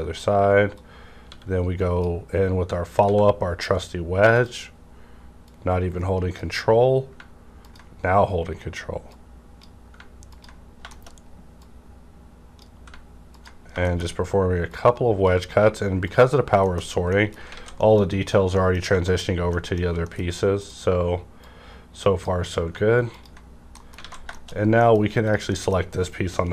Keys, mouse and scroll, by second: 0.7-3.0 drag, 1.3 w, 3.0 w, 4.3 click, 4.8-5.5 scroll down 1, 5.5-7.6 drag, 7.6-9.0 ctrl+drag, 9.0-10.9 ctrl+drag, 10.9 shift+middle click, 11.1 shift+scroll up 1, 11.5-13.3 drag, 11.6 scroll up 1, 13.3 ctrl+click, 13.6 scroll down 1, 13.8 shift+middle click, 14.1 scroll up 1, 14.6 click, 14.7-16.0 drag, 16.0 ctrl+click, 16.3-17.1 scroll down 3, 16.7 shift+middle click, 17.1 middle click, 17.5 alt+a, 17.7 middle click, 18.5 middle click, 18.5 scroll down 1, 19.1 middle click, 19.2 scroll up 1, 19.5 middle click, 20.1 middle click, 20.2 scroll up 1, 20.5 click, 21.3-23.1 drag, 23.1 ctrl+click, 23.4-23.8 ctrl+scroll down 3, 23.7 middle click, 24.0 alt+a, 24.4-24.7 shift+scroll down 2, 24.7 middle click, 25.2 click, 25.5 scroll down 1, 25.5 middle click.